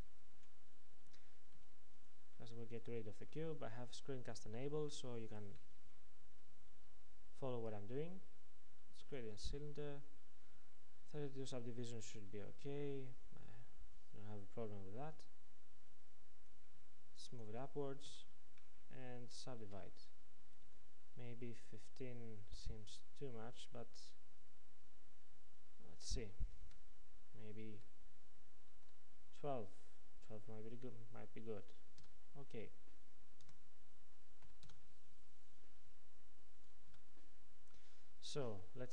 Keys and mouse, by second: 1.6 x, 3.2-5.7 middle drag, 6.9 shift+a, 18.1 Tab, 19.7 ctrl+r, 27.7 ctrl+r, 36.9 a.